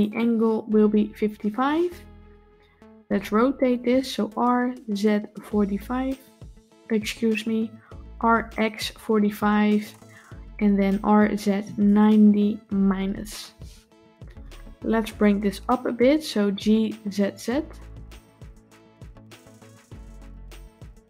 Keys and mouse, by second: 1.0 KP_5, 10.7 r, 16.3 g.